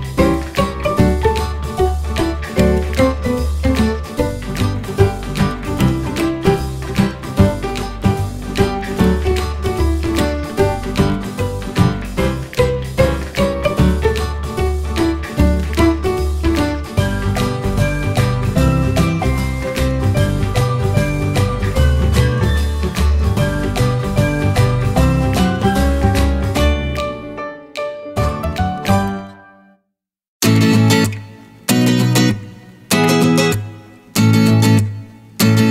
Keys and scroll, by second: 1.5 Delete, 3.1 Caps_Lock, 4.7 r, 8.1 ctrl+e, 8.3-10.7 typing, 13.0 ctrl+e, 13.1 w, 14.9 ctrl+e, 15.0 w, 21.4 w, 23.9 1, 28.0 ctrl+e, 28.2 r, 29.0 ctrl+e, 29.0 w, 30.5 ctrl+e, 30.5 w.